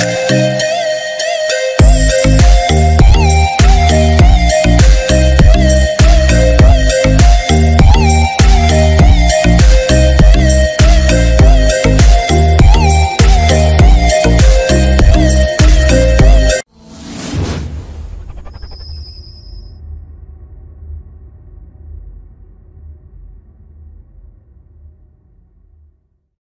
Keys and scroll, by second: 1.4 ctrl+-, 13.6 ctrl+-.